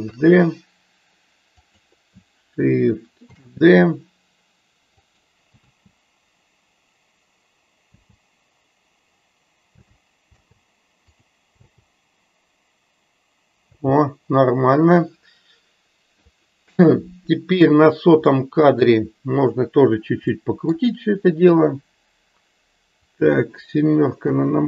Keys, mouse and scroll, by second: 11.2 click, 16.9 click, 18.3 middle click, 20.5 middle click, 23.1 click.